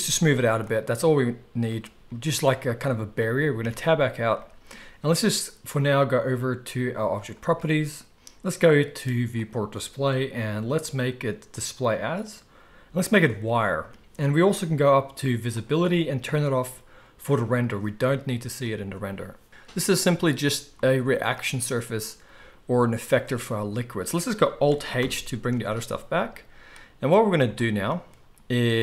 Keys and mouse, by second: 3.6 Tab, 7.1 click, 7.2-9.3 middle drag, 9.3-17.5 drag, 17.5-28.8 middle drag, 25.0 alt+h, 25.6 alt+a.